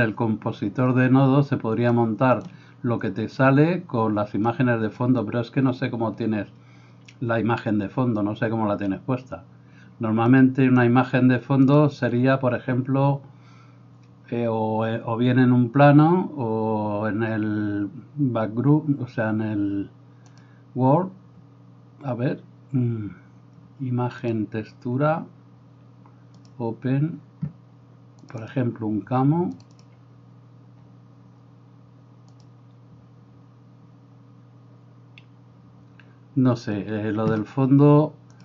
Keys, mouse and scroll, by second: 2.2-11.8 drag, 20.4-29.9 drag.